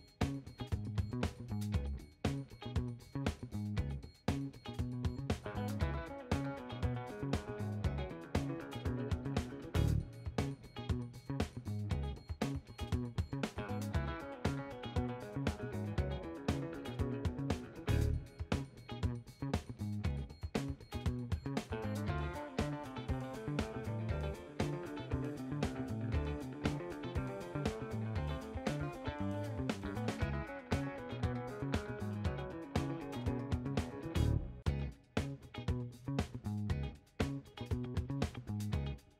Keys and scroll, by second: 0.2 w, 0.6 ctrl+a, 16.1 w, 34.8 w.